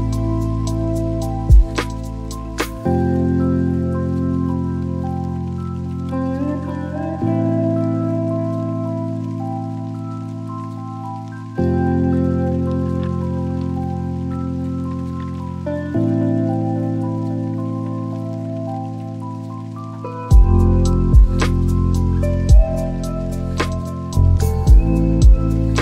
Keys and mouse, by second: 4.8 click, 8.9-11.5 drag, 12.3-14.2 drag, 18.4 click, 20.3-24.7 drag.